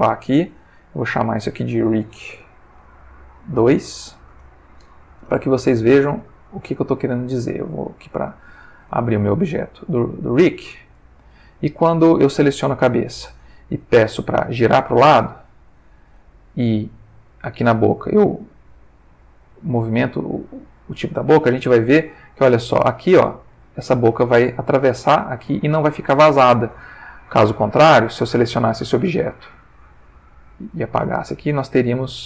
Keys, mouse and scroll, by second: 1.4 click, 2.1-3.5 typing, 3.9 Return, 5.9 click, 7.8 click, 9.3-12.1 shift+middle drag, 12.5 click, 14.1 click, 15.6 ctrl+middle click, 17.3 click, 18.4-21.2 drag, 21.4-22.4 ctrl+middle drag, 27.8 click, 30.5 click, 31.9 shift+middle click.